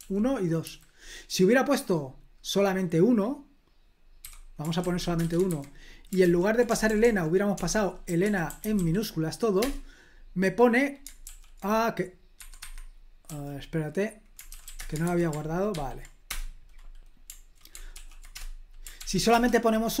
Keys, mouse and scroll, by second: 0.0-0.6 typing, 4.2-5.5 typing, 5.5 super+h, 6.2 ctrl+p, 6.7-9.2 typing, 9.6 Return, 11.2 super+l, 12.3 Escape, 12.6 Escape, 13.2 l, 14.4-15.2 typing, 15.7 ctrl+p, 16.3 Return, 17.9 ctrl+l, 18.3 Return, 19.0 ctrl+p, 19.3 Return.